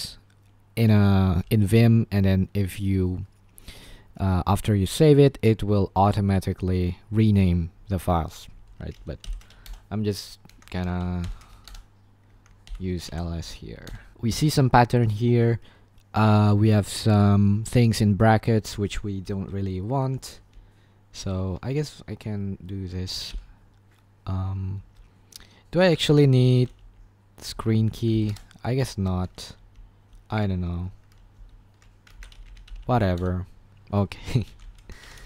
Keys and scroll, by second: 0.0-0.6 typing, 8.9-9.9 typing, 10.5 Escape, 11.2-14.6 typing, 11.6 Return, 20.5 ctrl+=, 20.8 ctrl+=, 20.8-21.1 ctrl+=, 23.2 [, 25.6-28.1 typing, 28.1 ctrl+l, 28.2 Return, 34.2-35.2 typing.